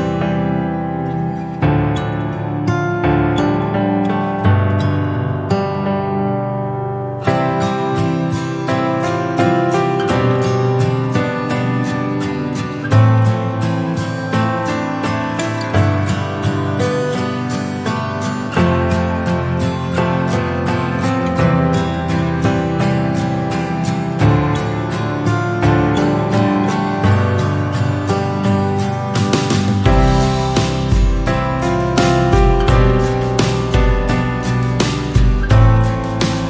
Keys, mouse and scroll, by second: 0.5 scroll up 1, 0.7 scroll down 2, 1.0-1.4 middle drag, 1.4-1.7 scroll up 1, 1.7-2.3 shift+middle drag, 2.3 s, 5.0 /, 5.4 scroll down 2, 5.6 middle click, 6.0 Tab, 7.9 scroll down 2, 8.2-9.7 middle drag, 9.7 f, 10.2 middle click, 10.5 e, 13.2 /, 13.8 Tab, 15.1 KP_3, 16.4 click, 18.0 scroll up 2, 18.4-19.2 shift+middle drag, 19.2 click, 19.6 click, 20.7-22.6 right drag, 22.6 click, 23.1 click, 25.3 click, 29.7 s, 31.4 scroll down 2, 31.7-32.2 middle drag, 32.2 drag, 32.6 click, 33.5 shift+s, 35.3 KP_1, 35.6 KP_3, 36.2-36.4 scroll up 1.